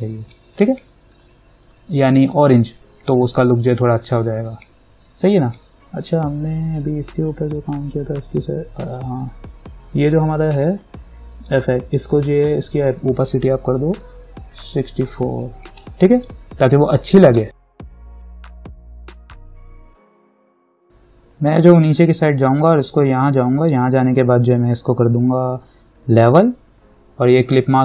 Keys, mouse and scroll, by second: 7.5 click, 10.4-14.7 drag, 14.4-15.2 typing, 16.0 click, 17.7 ctrl+=, 19.1 scroll down 1, 19.6 scroll down 1, 21.6-21.9 scroll down 1, 22.7 click, 26.2 click.